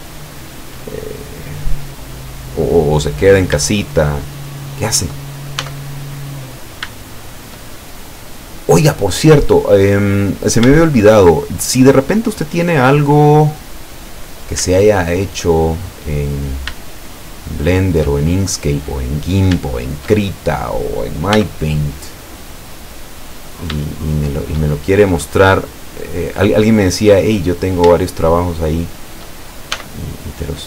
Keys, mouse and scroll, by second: 0.1-0.8 shift+middle drag, 1.0-1.9 shift+middle drag, 2.0-2.4 scroll down 2, 3.3 right click, 3.9 shift+right click, 4.2 shift+right click, 4.6 shift+right click, 5.7 e, 6.6 click, 7.0-7.7 shift+middle drag, 8.2-9.6 middle drag, 9.7-10.2 middle drag, 12.4-12.7 scroll down 2, 13.2-14.7 middle drag, 14.8-15.6 shift+middle drag, 16.4 right click, 16.8 shift+right click, 17.3 shift+right click, 18.2-19.2 shift+middle drag, 19.3 scroll up 1, 19.7-21.0 shift+middle drag, 21.4 e, 23.3 click, 23.9-24.7 shift+middle drag, 24.8-25.7 shift+middle drag, 27.3 right click, 28.0 shift+right click, 28.4 shift+right click, 28.9 shift+right click, 29.8 e.